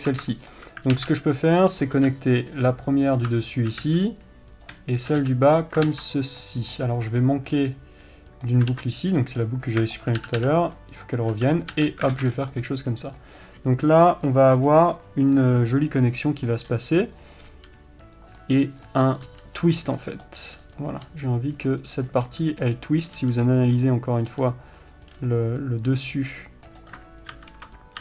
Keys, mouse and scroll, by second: 0.7-2.2 shift+middle drag, 1.3 alt+a, 2.2 click, 2.4 f, 3.3 click, 3.9 shift+click, 4.2 f, 5.0 click, 5.4 shift+click, 5.6 f, 6.2 ctrl+z, 6.8-9.8 middle drag, 9.1 ctrl+r, 9.8 click, 10.4 shift+click, 10.6 f, 11.1-17.7 middle drag, 11.7 f, 12.5 alt+a, 12.6 scroll down 1, 14.9 scroll up 1, 15.0-16.3 scroll down 1, 17.0-17.7 scroll up 1, 17.7 click, 17.9 g, 18.8-19.5 middle drag, 19.5 click, 19.6 g, 20.2 middle click, 20.7 click, 20.8 g, 21.4 click, 22.0 click, 22.6 g, 23.5 click, 24.6 g, 25.5 scroll down 1, 25.6-28.0 middle drag, 27.7 ctrl+KP_7.